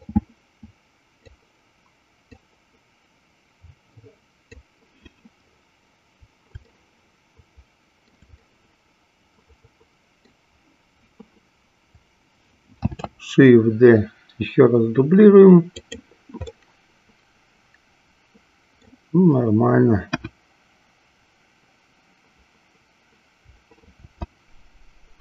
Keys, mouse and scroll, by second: 0.2-1.5 drag, 2.8-4.6 drag, 7.0-10.7 shift+middle drag, 13.0 shift+d, 15.9 click, 16.9-19.4 middle drag, 20.2 KP_1, 24.1 shift+d.